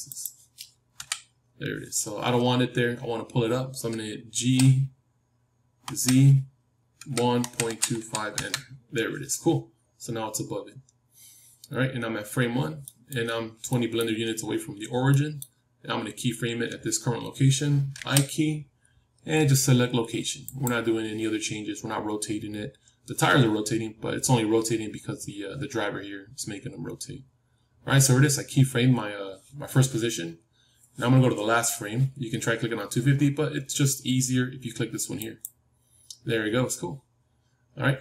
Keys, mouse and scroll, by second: 0.0 middle click, 0.9 KP_3, 4.3 g, 12.4-17.8 middle drag, 17.8 i, 22.5-23.9 scroll up 1, 23.9 middle click, 26.5 middle click, 30.0-31.2 middle drag, 35.1-37.1 drag.